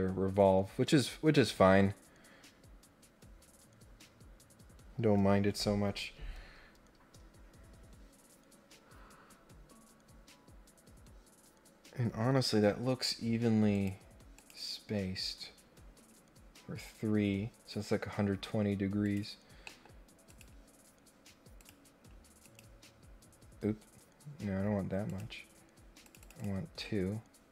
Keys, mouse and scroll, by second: 13.7 click, 14.3 click, 15.8 scroll down 1, 19.0 click, 19.6 middle click, 20.2 click, 21.5 click, 22.4 click, 25.0 click, 26.0 click, 26.3 click.